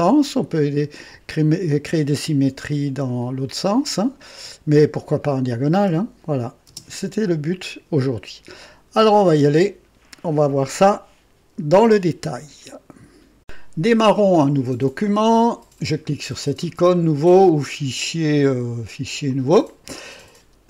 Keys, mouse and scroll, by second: 5.7 space, 6.6 space, 12.6 right click, 13.4 click, 17.5 click, 19.2 click.